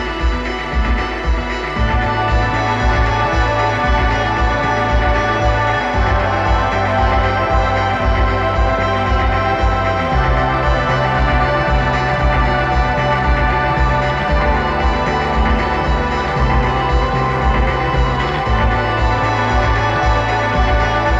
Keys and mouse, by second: 1.2 r, 5.9-9.2 drag, 10.3-13.2 drag.